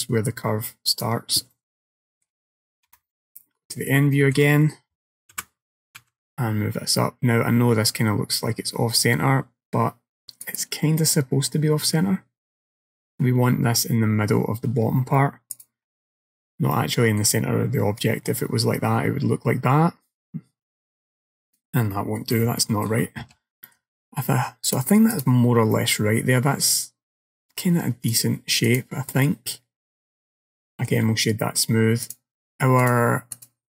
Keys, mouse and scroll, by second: 1.6 middle click, 2.9 KP_1, 3.2 KP_3, 3.9 scroll down 3, 4.2 shift+middle click, 5.4 g, 11.1 middle click, 15.6 click, 16.8 middle click, 18.1 click, 22.0 middle click, 22.7 shift+middle click, 23.7 middle click, 24.7 click, 25.8 middle click, 27.6 scroll down 1, 28.1 right click, 29.3 middle click, 30.6 shift+middle click, 31.3-32.1 scroll up 2, 32.1 click, 32.9 click.